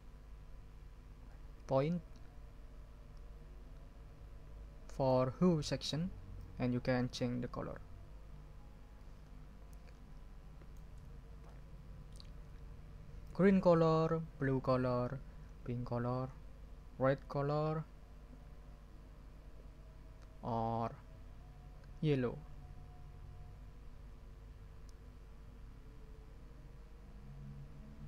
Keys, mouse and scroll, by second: 6.3-10.9 drag, 11.5 ctrl+click, 11.9 middle click, 13.2-28.0 drag.